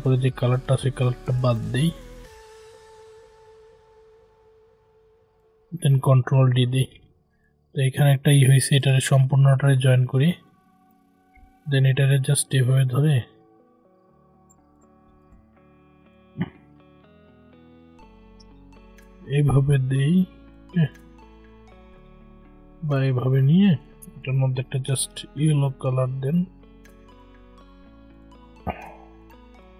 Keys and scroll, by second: 6.3 ctrl+d.